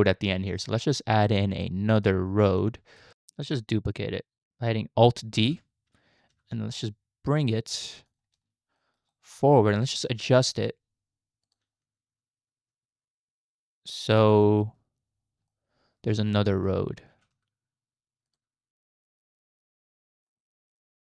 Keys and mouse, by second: 0.6 middle drag, 1.6-2.1 middle drag, 2.3-2.7 shift+middle drag, 5.4 alt+d, 8.8 shift+middle drag, 9.2-9.6 middle drag, 9.6 click, 9.6 right click, 9.8 r, 11.8 g, 15.5 shift+middle click, 15.6 shift+drag, 15.7-16.7 shift+middle drag, 17.1 g, 20.7 click.